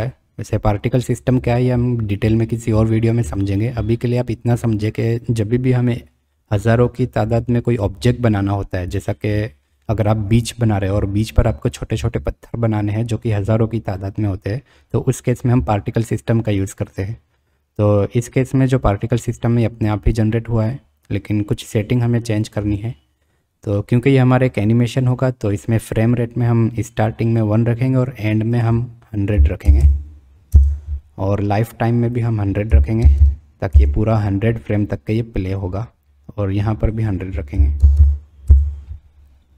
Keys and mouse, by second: 28.7-31.2 drag, 29.8 KP_0, 32.1-34.4 drag, 33.1 KP_0, 36.9-39.0 drag, 37.9 KP_0.